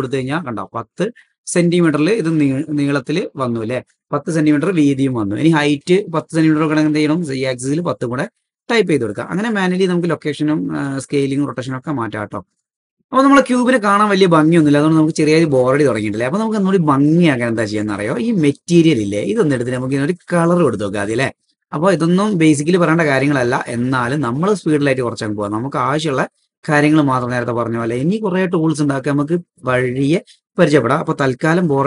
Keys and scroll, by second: 2.9-3.3 typing, 6.6 super+z, 7.7 super+z.